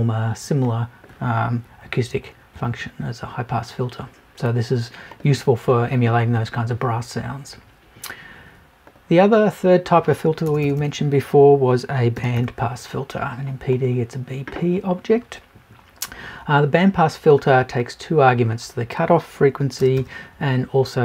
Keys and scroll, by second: 1.6 Up, 10.4 BackSpace.